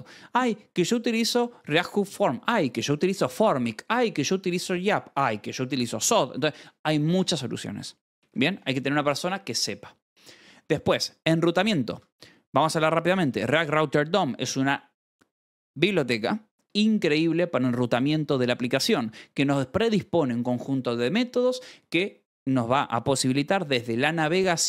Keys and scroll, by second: 7.9 j, 8.5 ctrl+s, 10.0-12.5 typing, 10.5 Escape, 11.9 Escape, 17.9 Escape.